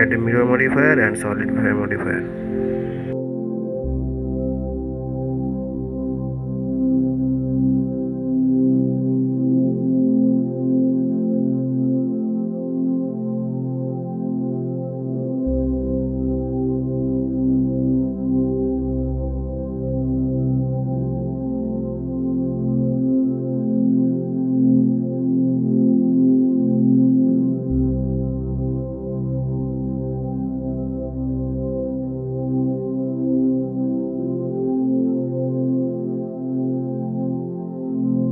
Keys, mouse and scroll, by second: 3.5 click, 4.1-19.0 drag, 20.2-22.9 middle drag, 22.9 click, 25.6-26.4 drag, 29.4-32.1 drag, 32.1-33.9 middle drag, 33.9 drag, 34.3 scroll down 2, 34.7-38.3 middle drag.